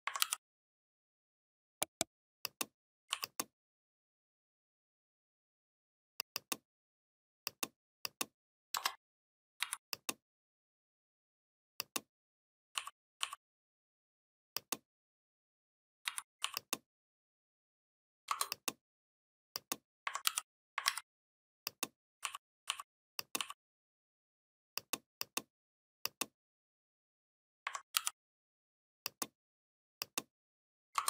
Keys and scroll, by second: 0.0 ctrl+g, 8.6 Return, 9.4 v, 15.9 v, 20.1 ctrl+g, 20.7 ctrl+a, 27.8 ctrl+g.